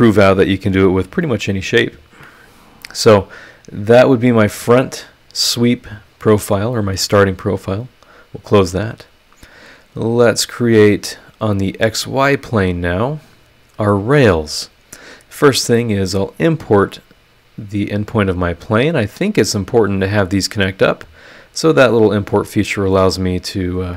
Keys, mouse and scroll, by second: 2.1 Escape, 7.5 click, 8.9 click, 10.0 click, 10.6 scroll down 1, 12.2 click, 13.2 click, 16.0 click, 17.9 click, 18.6 scroll up 1, 23.4 click.